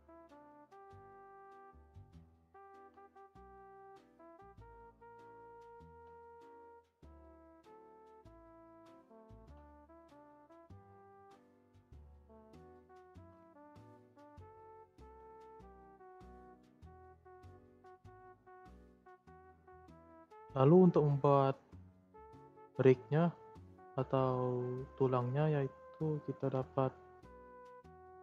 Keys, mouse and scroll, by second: 1.2 shift+middle click, 1.5 scroll up 2, 2.3 click, 2.7 ctrl+a, 4.8 click, 5.2 scroll up 3, 5.2 shift+middle click, 6.2 ctrl+a, 8.0 g, 9.0 click, 9.3 ctrl+a, 11.2 click, 11.4 g, 12.7 scroll down 6, 12.9 shift+scroll up 1, 13.0-13.4 shift+middle drag, 13.4 Tab, 13.6 click, 13.8 scroll down 2, 14.0 scroll up 1, 14.1-15.2 middle drag, 15.2 click, 15.5 scroll down 1, 15.5-16.7 middle drag, 16.7 click, 16.9 scroll up 1, 16.9-17.5 middle drag, 17.5 scroll up 1, 17.6 scroll down 1, 17.8-18.3 middle drag, 18.3 click, 18.7-26.2 shift+middle drag, 26.2 scroll down 2, 27.2 scroll up 1.